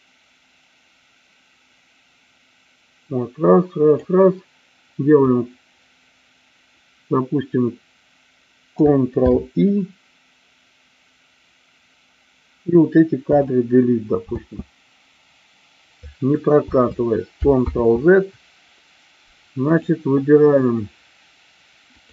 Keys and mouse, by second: 9.0 ctrl+i, 13.2 Delete, 14.2 space, 17.3 ctrl+space, 17.7 ctrl+z, 19.6 click, 21.9 click.